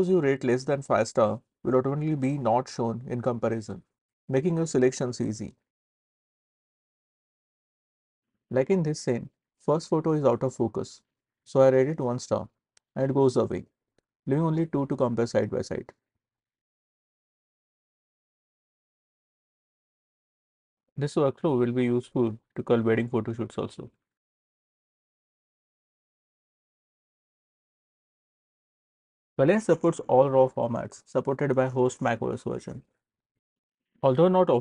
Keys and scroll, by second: 1.0 5, 2.8 4, 12.5 1.